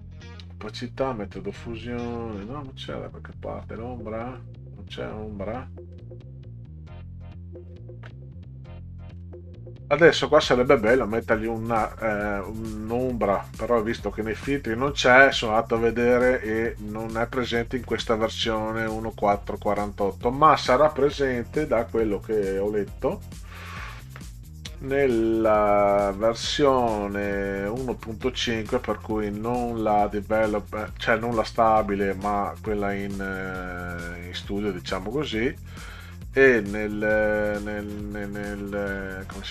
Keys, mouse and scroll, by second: 1.4 click, 2.0 click, 2.7 scroll up 2, 4.3 click, 5.9 click, 9.1 click, 11.9 click, 14.1 drag, 14.5-14.9 drag, 17.6 click, 21.9 click, 23.2 click, 24.7 click, 34.1 click, 35.1-35.7 scroll up 6, 37.9 click, 38.7 click.